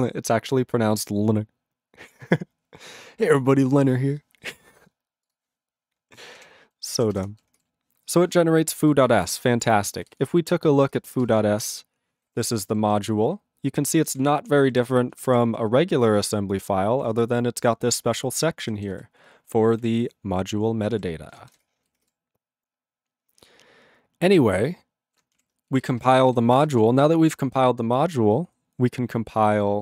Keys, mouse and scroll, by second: 5.2 click, 5.3 click, 6.3 ctrl+p, 7.2 Return, 9.6 click, 11.6 ctrl+Return, 12.2 ctrl+=, 12.9 ctrl+space, 13.0 ctrl+n, 14.1 ctrl+g, 14.2 ctrl+p, 14.7 ctrl+=, 15.1 ctrl+p, 17.8 ctrl+space, 17.9 ctrl+e, 18.6 ctrl+n, 19.8 ctrl+e, 20.9 ctrl+g, 21.6 Return.